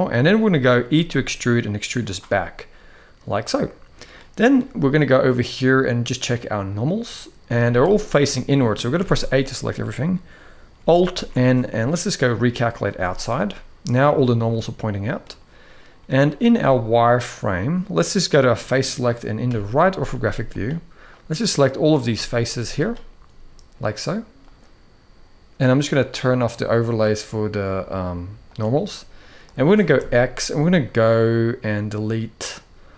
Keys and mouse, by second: 0.2 middle click, 0.7 e, 2.1-3.8 middle drag, 5.1-6.8 drag, 7.3 z, 8.0 middle click, 8.7 a, 10.9 alt+n, 12.6 z, 13.2 middle click, 14.2 middle click, 15.9-19.1 drag, 19.2 KP_3, 19.9 z, 20.8 click, 21.8 middle click, 22.2 z, 24.2-25.8 drag, 26.1-28.5 drag, 28.7 middle click, 29.7 x.